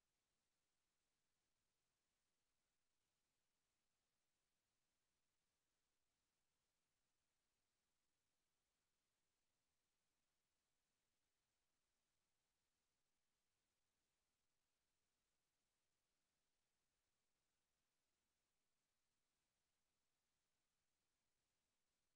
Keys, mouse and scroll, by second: 11.4 n.